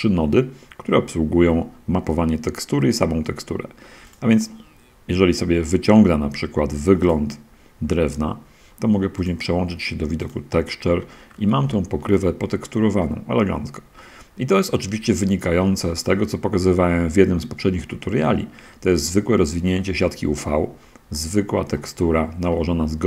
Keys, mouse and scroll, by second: 4.1 click, 7.1 click, 9.5 click, 10.3 click, 11.6 middle click, 11.7 shift+drag, 11.8-12.4 shift+middle drag, 12.4 shift+scroll up 1, 12.6-14.9 shift+middle drag, 14.9-15.7 drag, 15.9-16.3 drag, 16.9-17.9 drag, 17.9 middle click, 18.5-19.9 drag, 19.9 middle click, 20.8 click, 21.5-23.0 drag.